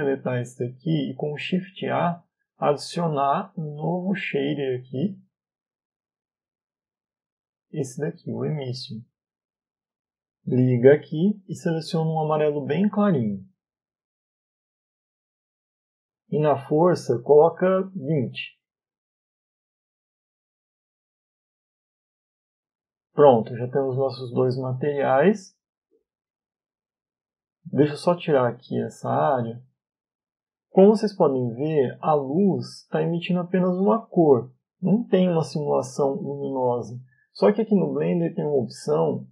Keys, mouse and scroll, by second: 0.2 click, 1.0 Delete, 1.8 shift+a, 10.8 click, 12.6 click, 17.5 click, 22.3 middle click, 23.3 click, 24.6 click, 26.2 click, 27.5 right click.